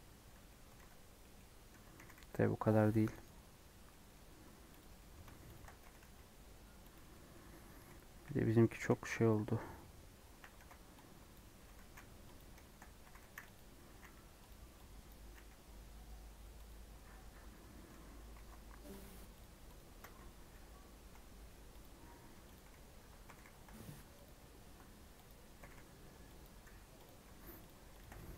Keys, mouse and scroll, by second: 0.3 Tab, 0.4 middle click, 0.7 alt+z, 0.9 scroll down 1, 1.1 middle click, 1.7 Tab, 2.0 g, 3.8 middle click, 4.7 alt+click, 4.9 middle click, 5.5 alt+shift+click, 5.8 g, 7.1-8.1 middle drag, 8.1 KP_1, 8.7 a, 9.7 scroll up 1, 10.3 1, 10.5 alt+z, 11.3 click, 11.6 g, 12.5 shift+middle click, 13.0 g, 13.9 s, 15.0 click, 15.3 s, 17.4 Tab, 17.7 Tab, 17.8 3, 18.3 alt+z, 18.9 click, 19.3 shift+click, 19.7 shift+click, 20.4 i, 22.1 2, 22.5 click, 23.3 g, 25.2 click, 25.6 g, 26.6 3, 27.0 click, 27.6 shift+click, 27.9 shift+click, 28.1 middle click.